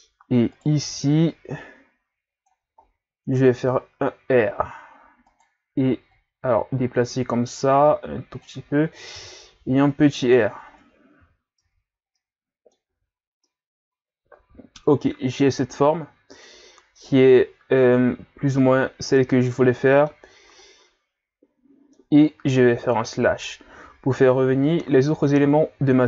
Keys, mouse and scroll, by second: 0.5 right click, 0.8 b, 2.8 ctrl+scroll up 3, 3.7 r, 6.1-9.7 drag, 9.7 r, 11.2 z, 11.6 Tab, 11.9 scroll down 2, 12.1-12.9 middle drag, 12.9 a, 13.2 scroll down 1, 13.4-16.4 middle drag, 18.6-23.0 middle drag, 23.0 KP_Divide, 24.5-25.2 ctrl+scroll up 2, 25.2 scroll up 2.